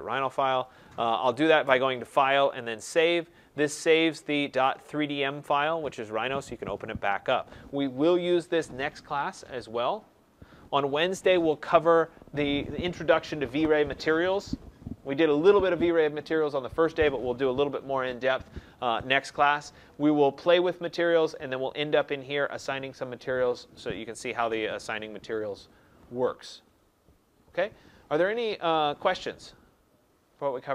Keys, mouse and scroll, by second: 1.6 click, 2.9 click.